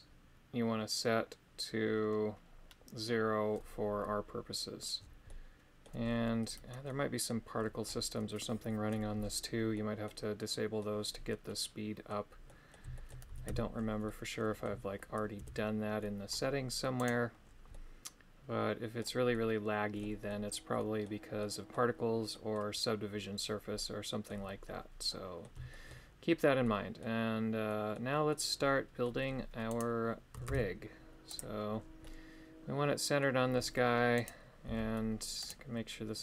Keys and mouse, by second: 5.2 middle click, 6.8 middle click, 9.7 middle click, 10.4 middle click, 11.4 middle click, 12.4 middle click, 13.0 shift+middle click, 13.3 a, 13.4 a, 14.0 middle click, 15.3 KP_3, 17.1 right click, 17.7-19.0 middle drag, 19.3 middle click, 20.2 middle click, 21.4 middle click, 22.3 middle click, 23.7 middle click, 25.0 middle click, 25.7 shift+middle click, 26.6 middle click, 27.6 middle click, 28.2 middle click, 29.7 right click, 30.4 shift+s, 32.0-33.2 middle drag, 34.2 right click, 34.6 g, 35.3 right click.